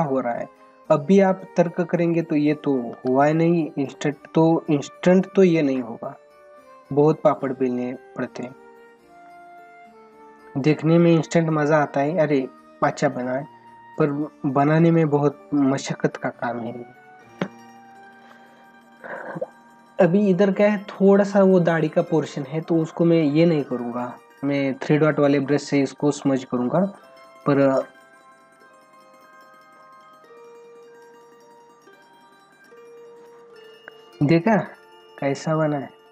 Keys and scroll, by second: 2.9 ctrl+alt+z, 3.4 ], 6.7 ], 9.9 ], 12.7 ], 14.3 ], 16.4 ctrl+-, 35.6 ctrl+=.